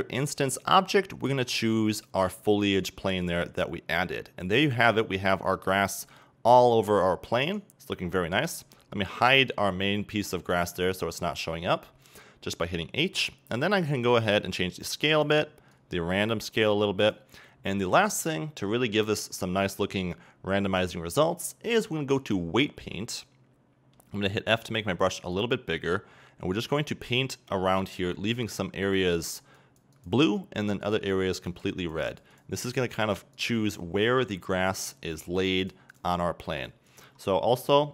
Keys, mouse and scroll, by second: 4.0 middle click, 4.0-4.8 scroll up 2, 4.8-7.5 middle drag, 7.5 right click, 8.4 h, 9.6 scroll down 2, 9.9-10.2 middle drag, 10.9 right click, 14.4-18.8 drag, 18.6 scroll down 2, 18.8-19.2 middle drag, 19.2 scroll up 2, 22.0-22.4 scroll up 1, 22.4-24.0 drag, 24.0 f, 25.3-33.2 drag, 33.4-37.9 drag.